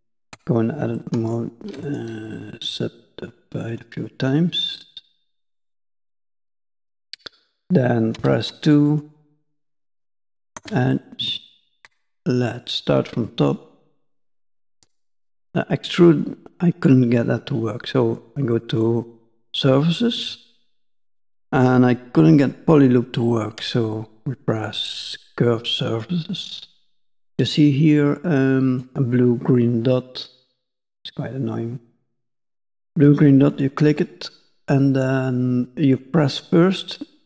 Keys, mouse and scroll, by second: 0.3 Tab, 1.0 shift+middle click, 1.9 right click, 5.2 click, 5.4 click, 5.9 click, 6.4 click, 8.2 2, 8.9 click, 10.0 ctrl+click, 11.0 shift+middle click, 13.2 click, 14.5 click, 18.0 click, 25.9 click, 26.8 middle click, 27.7-28.2 scroll up 3, 28.4 shift+middle click, 29.2 scroll up 1.